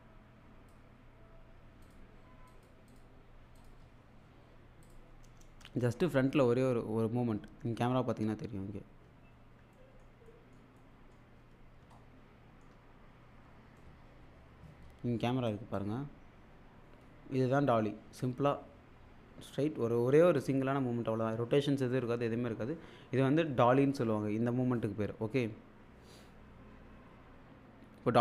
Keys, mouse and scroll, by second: 4.9 click, 5.6 space, 8.1-8.7 scroll up 1, 9.3-9.8 alt+scroll up 2, 9.8 alt+middle click, 11.5-11.8 scroll up 1, 11.9-12.8 shift+middle click, 12.8-13.6 scroll up 1, 15.5 click, 25.4-26.0 scroll up 1.